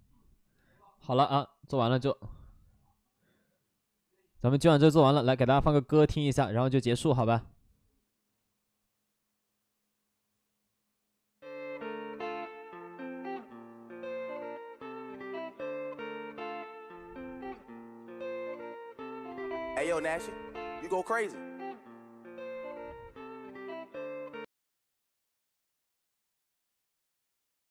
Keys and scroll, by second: 23.4 Return.